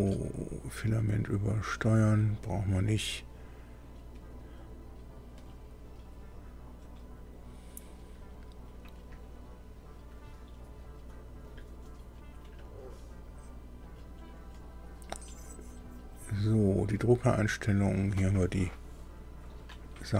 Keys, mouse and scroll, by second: 0.3 click, 10.1 click, 11.4 click, 12.6 click, 17.6 click, 19.5 click.